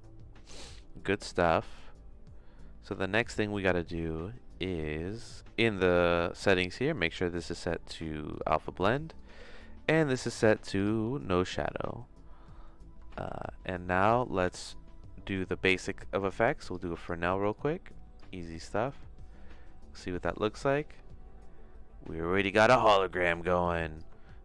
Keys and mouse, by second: 7.1-8.5 drag, 9.2-12.4 drag, 12.5 middle click, 13.1 shift+a, 17.5 click, 18.9-24.0 drag.